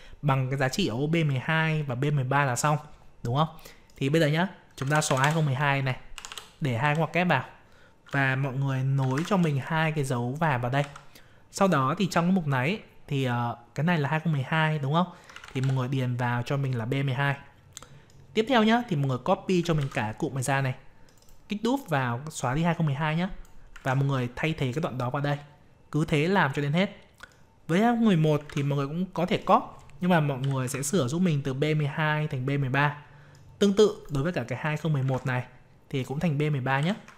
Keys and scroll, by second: 19.8 ctrl+c, 23.8 ctrl+v, 35.0 ctrl+v.